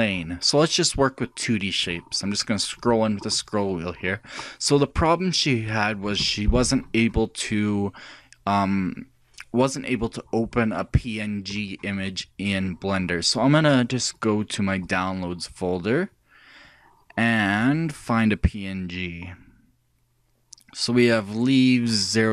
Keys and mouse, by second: 1.4-4.8 middle drag, 5.3-6.3 middle drag, 6.9-8.9 middle drag.